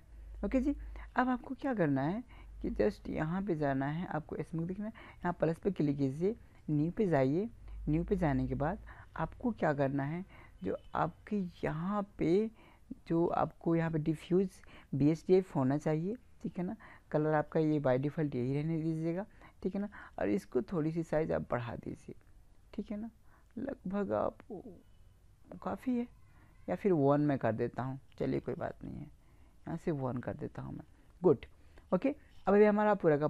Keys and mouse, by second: 5.3-8.5 drag, 20.0-21.8 drag, 27.2-29.0 drag.